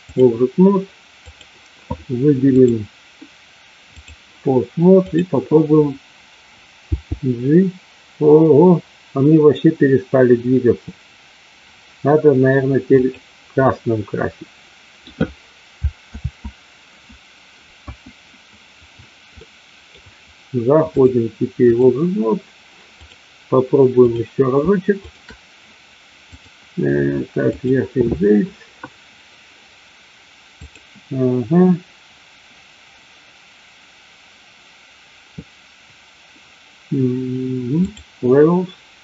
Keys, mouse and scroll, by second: 1.3 click, 2.5-4.1 drag, 5.1 click, 6.7 g, 13.6-15.0 scroll up 1, 15.0 middle click, 16.2 ctrl+z, 17.7 q, 19.3 middle click, 21.0-21.8 drag, 23.0 click, 25.0 shift+click, 26.3-27.7 drag, 30.6-38.0 drag.